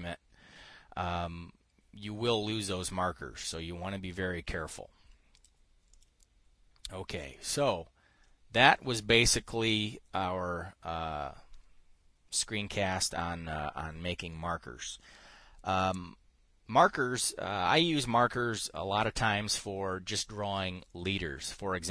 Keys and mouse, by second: 5.8 click, 6.4 click, 7.8 click, 9.1 click.